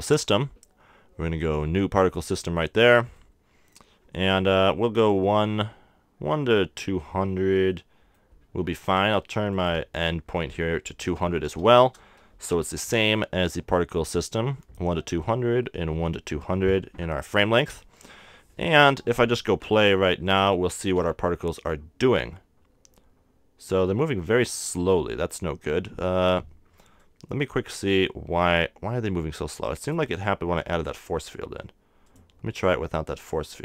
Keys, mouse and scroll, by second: 0.2-3.7 drag, 3.2-5.1 middle drag, 7.5 scroll up 1, 7.7-9.5 middle drag, 11.1 click, 11.6 0, 20.2-22.3 drag, 22.3 z, 28.0 click, 29.8-32.0 right drag, 30.6 x, 32.0-33.6 drag.